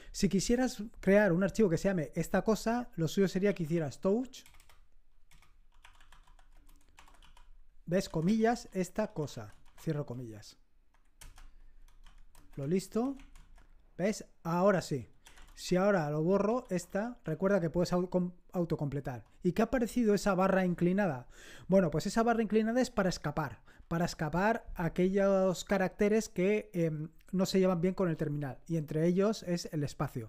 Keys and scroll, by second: 3.2-10.0 typing, 11.1 Return, 11.6-13.6 typing, 14.9-17.3 typing.